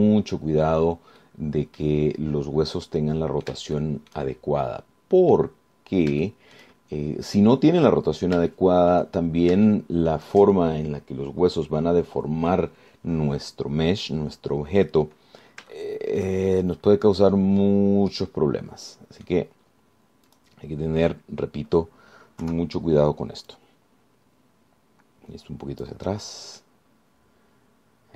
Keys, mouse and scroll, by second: 0.8 scroll down 2, 1.6 scroll down 2, 2.4 click, 3.0 scroll up 2, 3.2-3.8 scroll down 4, 4.2 right click, 5.0 shift+right click, 5.8 right click, 6.9-7.2 scroll up 1, 7.4 shift+right click, 7.8 shift+scroll up 1, 8.0-8.4 shift+scroll down 2, 8.6 click, 9.3 scroll down 2, 9.7 shift+click, 10.5 shift+scroll up 2, 10.9 shift+click, 14.6-15.0 scroll down 2, 15.5 scroll down 2, 16.0 scroll up 2, 17.0 shift+click, 18.0-18.8 scroll up 4, 19.3-20.6 drag, 21.5 click, 23.6 KP_3, 24.7-27.2 drag, 27.5 scroll down 2, 27.8-28.1 drag.